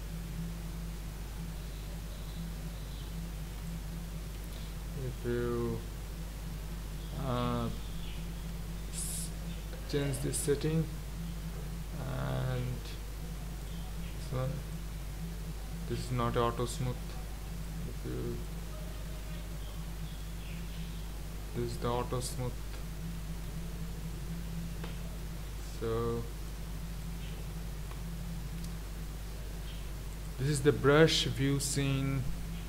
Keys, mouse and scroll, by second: 4.3 ctrl+z, 13.6 click, 14.7-19.4 drag, 19.4 ctrl+z, 20.2-23.5 drag, 23.5 ctrl+z, 28.3-32.6 drag.